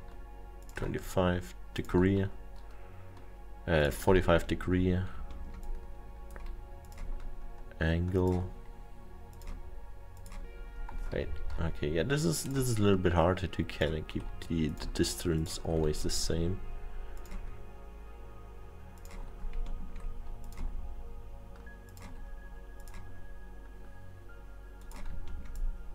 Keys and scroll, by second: 11.3 ctrl+z, 11.5 ctrl+z.